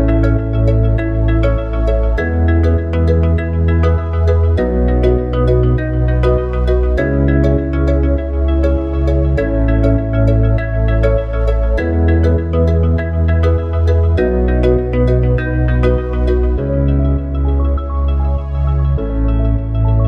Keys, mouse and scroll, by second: 4.2 shift+click, 4.8 click, 8.9 ctrl+v, 9.4 click, 13.0 click, 18.7 ctrl+v.